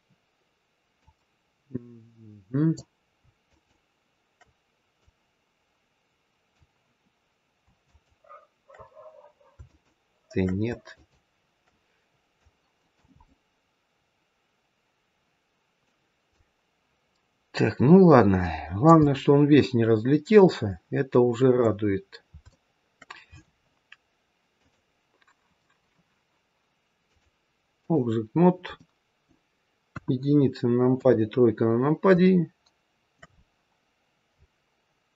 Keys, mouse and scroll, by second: 3.4 shift+click, 5.0 click, 7.7 shift+click, 10.3 shift+click, 12.3 click, 13.1 middle click, 16.3 click, 19.0 middle click, 19.0-19.3 scroll up 1, 21.9-22.4 scroll down 2, 22.4 shift+middle click, 24.4 click, 27.0 click, 28.3-28.7 scroll down 3, 28.7 middle click, 29.8 KP_1, 30.8 KP_3, 32.2 shift+middle click, 33.3-33.9 scroll down 2.